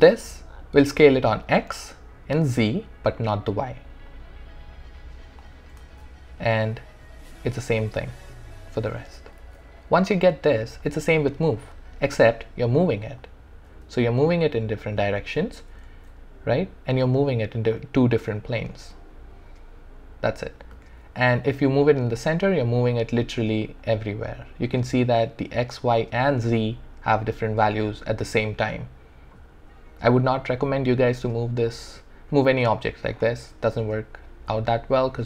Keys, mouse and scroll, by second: 4.1-5.9 drag, 5.9 ctrl+z, 6.7 click, 7.5 ctrl+z, 8.1-9.4 drag, 9.4 ctrl+z, 11.6-15.4 drag, 15.2 ctrl+z, 15.9 ctrl+z, 17.1 click, 18.6-20.2 drag, 20.8 ctrl+z, 22.2-24.7 drag, 28.6-35.2 drag.